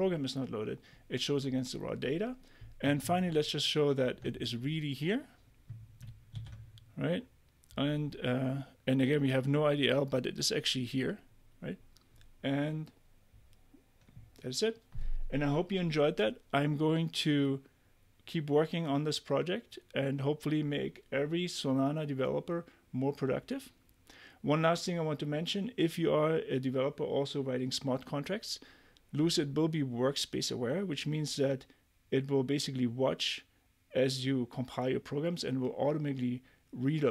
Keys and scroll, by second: 3.1 super+Tab, 6.3 super+r.